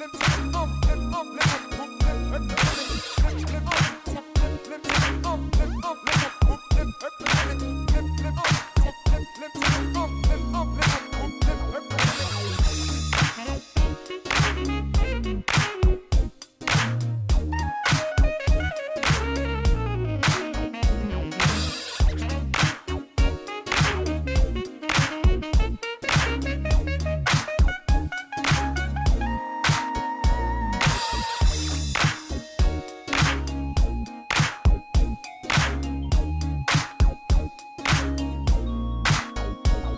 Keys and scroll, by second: 0.7 g, 1.8 g, 2.9 g, 3.5 g, 4.3 g, 5.6 ctrl+r, 6.1 ctrl+r, 7.4 g, 8.7 g, 10.2 g, 11.2 g, 12.7 shift+z, 13.0 Tab, 13.3 alt+a, 16.7 1, 16.9 shift+z, 18.6 x, 20.5 ctrl+p, 21.0 shift+z, 22.6 shift+z, 25.5 Tab, 27.0 g, 28.5 g, 29.7 g, 31.2 g, 31.7 g, 33.0 g, 33.6 g, 34.2 g, 35.5-38.1 typing.